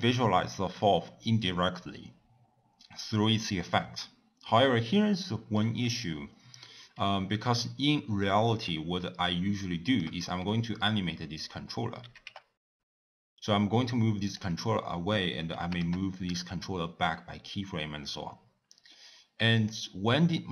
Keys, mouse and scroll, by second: 8.9-12.0 shift+middle drag, 12.0 g, 15.4 g.